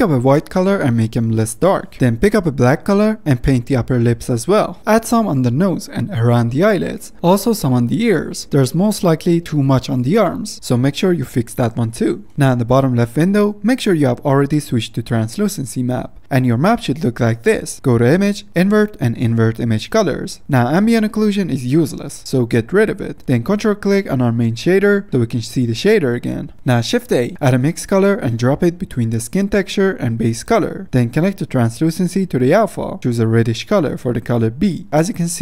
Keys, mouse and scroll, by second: 26.8 shift+a, 29.2-30.0 scroll up 9, 29.7-30.7 middle drag, 30.7-32.8 drag, 34.9-35.2 scroll up 1, 35.2 click.